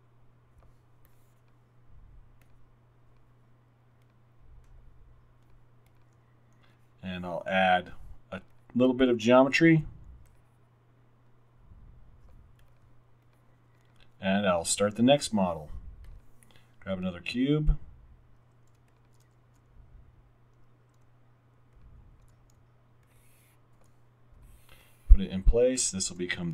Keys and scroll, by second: 9.7 r, 18.8 x, 19.5 w, 21.1 x, 22.6 x, 23.7 x, 26.1 r.